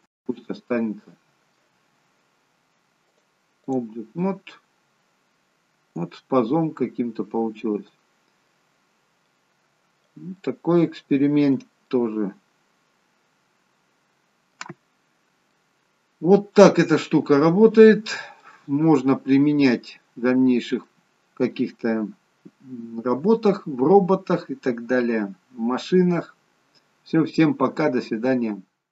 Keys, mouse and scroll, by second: 0.4 middle click, 3.0 click, 4.1 middle click, 8.8-9.8 scroll down 2, 9.1 middle click, 10.3 middle click, 12.0 middle click, 14.9-15.3 scroll down 3, 15.3 middle click, 17.5-17.9 scroll up 2, 18.3 middle click, 19.9-20.3 scroll up 1, 20.3-20.7 scroll down 2, 20.7 middle click, 26.5-28.0 scroll down 2.